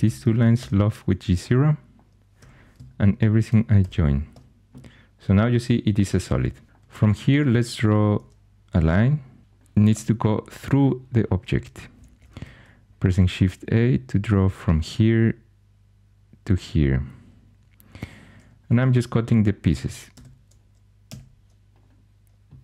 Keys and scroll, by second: 0.0-0.5 typing, 0.3 Tab, 2.3 4, 3.8 j, 7.8 shift+a, 9.9 2, 12.3 shift+a, 18.3 2, 21.0 c.